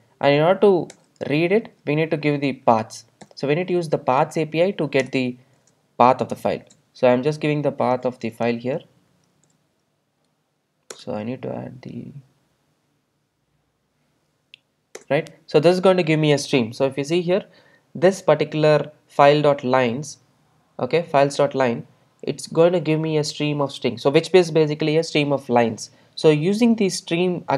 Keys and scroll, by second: 5.1 Return, 6.6 super+v, 11.0 alt+Return.